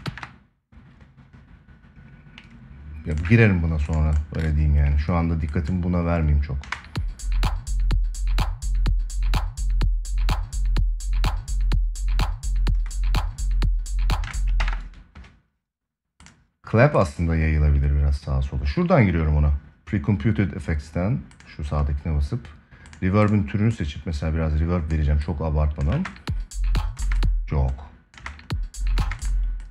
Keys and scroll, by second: 6.3 space, 14.0 space, 14.3 ctrl+s, 25.6 space.